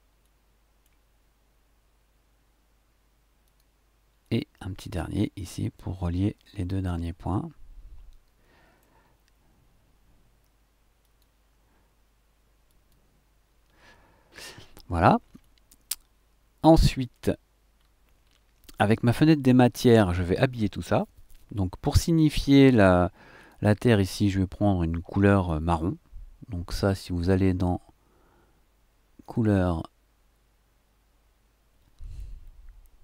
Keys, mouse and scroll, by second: 0.2 shift+click, 3.4 click, 4.2-5.4 drag, 5.6-6.9 drag, 7.0 click, 7.1-9.0 middle drag, 11.0 click, 12.7 click, 15.4-17.3 drag, 17.7-18.5 scroll down 1, 18.5 middle click, 18.7 scroll down 1, 22.8 click, 23.4 click, 29.2 click.